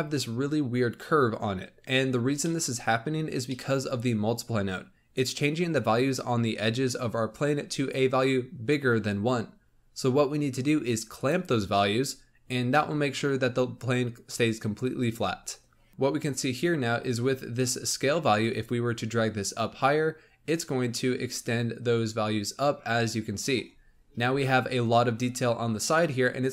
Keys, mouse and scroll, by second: 2.0-2.4 scroll up 2, 2.4-3.7 middle drag, 3.7-5.1 scroll up 1, 5.4 scroll down 1, 11.1 click, 12.3 scroll up 1, 12.7-13.5 middle drag, 13.5-15.1 scroll down 3, 15.1-15.9 scroll up 3, 15.9-16.4 middle drag, 16.4-18.3 scroll up 2, 18.3-21.4 shift+drag, 24.2-24.6 scroll up 3, 25.6 scroll down 1.